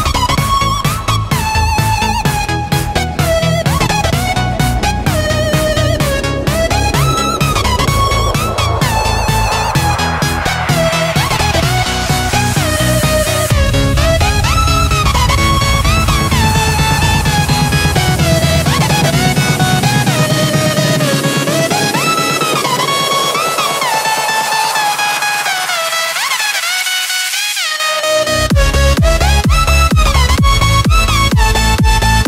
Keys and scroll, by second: 27.9-30.6 typing.